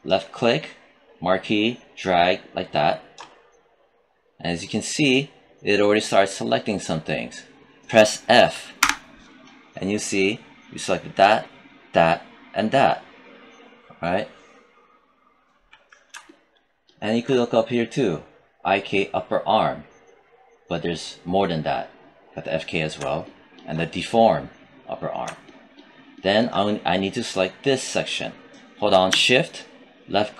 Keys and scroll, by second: 8.7 f.